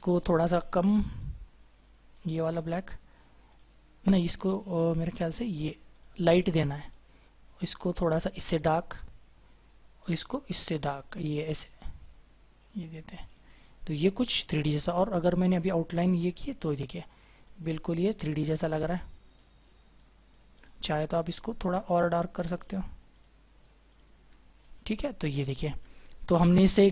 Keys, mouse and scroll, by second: 13.6 scroll down 1, 16.0 right click, 24.4-26.2 scroll down 1, 26.2-26.9 scroll up 1.